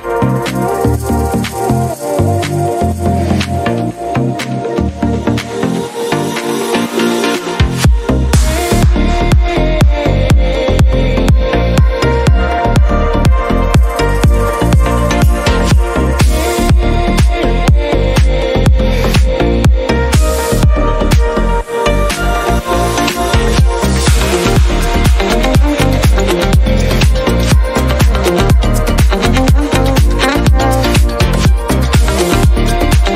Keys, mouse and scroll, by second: 1.2 click, 2.3 click, 4.2 shift+a, 4.7 shift+Return, 6.6 click, 7.6 click, 9.1 click, 11.7 click, 14.4 click, 16.9 click, 18.5 click, 20.4 click, 22.0 ctrl+click, 26.1 click, 27.8 click, 29.3 click, 30.4 right click, 32.1 click, 33.0 click.